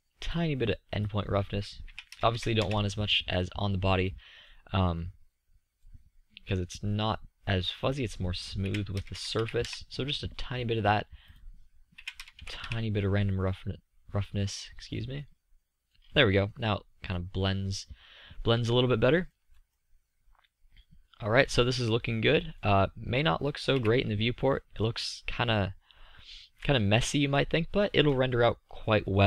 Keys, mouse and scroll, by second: 5.7-7.7 middle drag, 10.8 KP_0, 19.8 click, 19.8 middle click, 20.0 click, 20.0-21.5 middle drag, 23.5-24.2 middle drag, 25.4 KP_5.